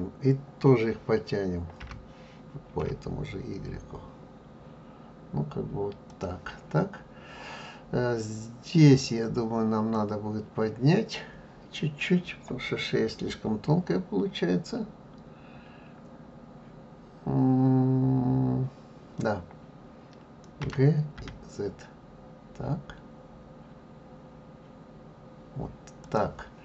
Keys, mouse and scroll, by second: 1.8 g, 8.9 click, 20.6 g.